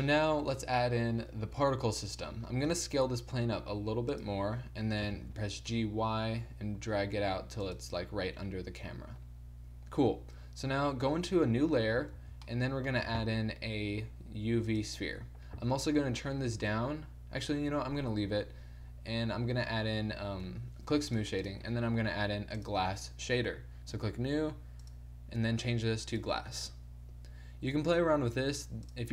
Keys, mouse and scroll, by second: 2.1-4.1 drag, 2.8 s, 5.1 g, 8.8-12.2 middle drag, 11.0 2, 12.2 shift+c, 13.1 shift+a, 15.7 t, 17.5 t, 20.5 t, 21.1-24.3 drag, 21.6 t.